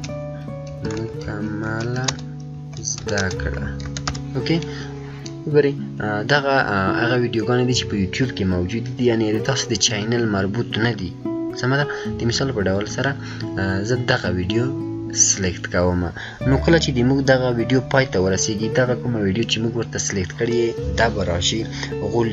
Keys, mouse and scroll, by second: 0.0-4.5 typing, 14.1 click.